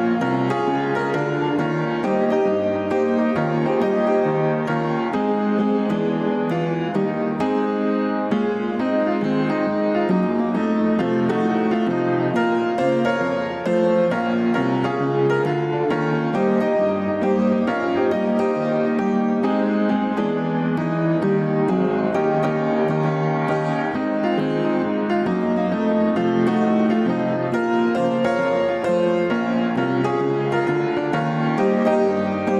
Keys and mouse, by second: 0.4 Tab, 2.0 w, 3.0 ctrl+r, 6.5-18.2 middle drag, 21.4-25.9 middle drag, 27.0-27.9 drag, 30.2 `, 32.2-32.5 drag.